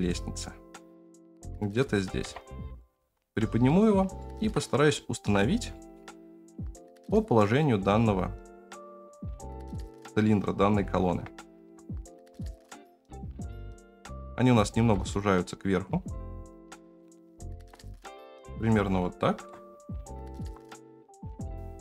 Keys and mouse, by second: 2.2 KP_0, 2.9 g, 4.1 shift+middle click, 4.9-5.2 shift+middle drag, 5.7 shift+middle drag, 6.5 g, 8.7-9.0 shift+middle drag, 10.2-10.7 middle drag, 11.1 Tab, 11.7 3, 11.8 click, 12.5 KP_0, 13.4 g, 14.9 s, 17.5 Tab, 18.9-19.4 shift+middle drag, 20.3 alt+z, 20.8 s, 20.9 g, 21.3 g, 21.5 space, 21.5 alt+z.